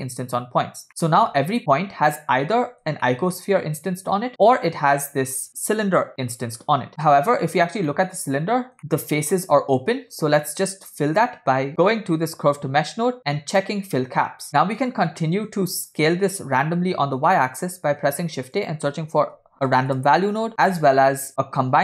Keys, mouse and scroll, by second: 0.9 middle click, 2.5 scroll up 4, 3.1-3.4 shift+middle drag, 7.9 shift+middle click, 8.5-8.8 scroll up 3, 10.5-10.8 scroll down 2, 11.3 middle click, 13.6 click, 14.9 scroll down 1, 15.3-15.8 middle drag, 16.0 scroll down 3, 17.3 middle click, 17.9 shift+a, 20.8 shift+a.